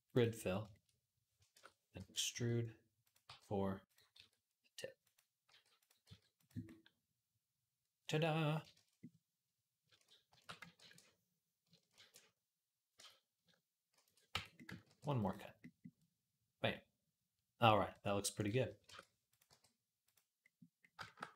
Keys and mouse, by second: 1.3 shift+Tab, 1.8 e, 2.1 s, 3.0 g, 3.9-10.1 drag, 3.9 s, 5.3 g, 5.8 s, 8.6 shift+Tab, 10.1 shift+d, 10.6 ctrl+a, 11.8 ctrl+a, 12.8 Tab, 13.8 ctrl+a, 14.1 Tab, 14.7 ctrl+r, 15.5-18.2 middle drag, 18.2 click, 18.3 middle click, 18.7 shift+Tab, 19.1 click, 19.2-20.9 middle drag, 19.3 g, 20.9-21.3 shift+drag.